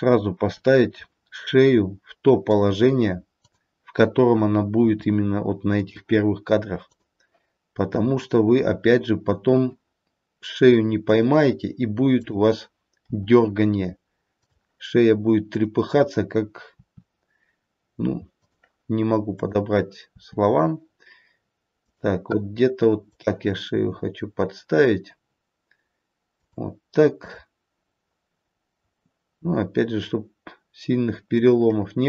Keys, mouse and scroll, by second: 0.3 r, 3.4 click, 4.7 r, 6.8 click, 8.7 r, 12.0 click, 12.9 r, 15.5 click, 16.8 r, 19.3 click, 21.8 r, 22.9 click, 26.0 r, 27.1 click, 29.3 r.